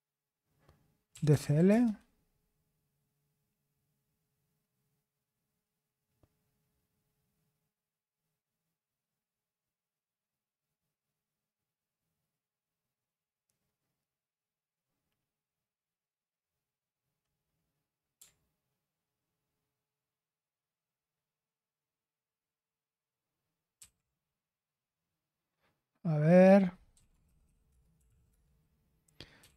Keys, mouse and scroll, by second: 0.8-1.8 typing, 23.7 ctrl+c, 26.6-29.5 typing.